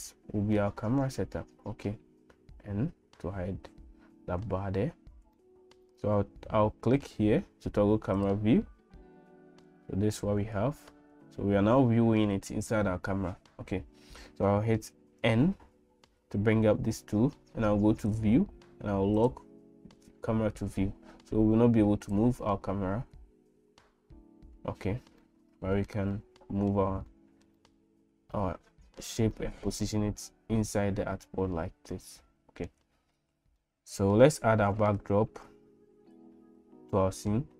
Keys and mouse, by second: 0.7 middle click, 2.4 n, 5.4 shift+middle click, 15.2 n, 19.2 click, 23.1 n, 25.2 middle click, 26.1 middle click, 27.1 middle click, 27.6 middle click, 28.4 shift+middle click, 29.4-32.7 middle drag, 33.6 middle click, 36.9 middle click.